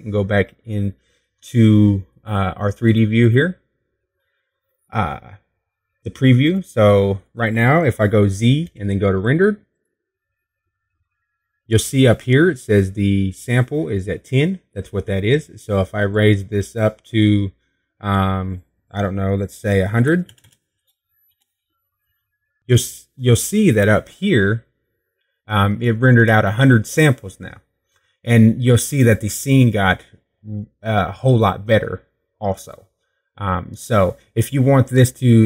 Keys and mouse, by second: 3.6-8.6 drag, 9.0 z, 21.7 KP_0.